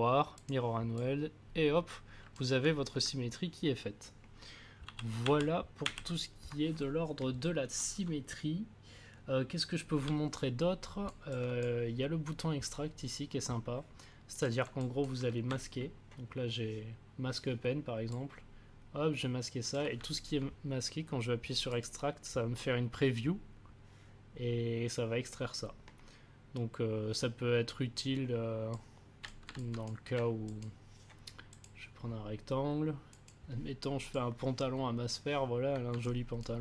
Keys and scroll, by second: 4.8 ctrl+z.